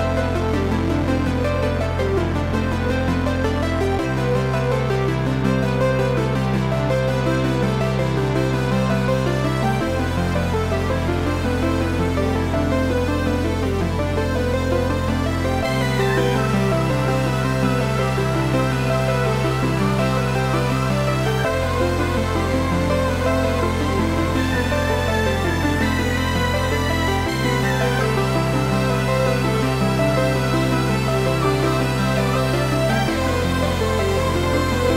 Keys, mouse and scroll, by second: 1.0 click, 1.1 s, 6.7 click, 6.9-10.5 middle drag, 9.4 g, 10.5 click, 10.7-11.7 middle drag, 11.7 Delete, 12.3 middle click, 12.5-12.8 scroll up 1, 13.8-14.1 scroll up 1, 14.1 shift+middle click, 14.8 scroll up 1, 15.2 shift+middle click, 16.6 click, 17.6 click, 18.6-19.5 scroll up 1, 19.5-23.9 drag, 25.4 click, 27.1-33.7 drag, 34.1 click.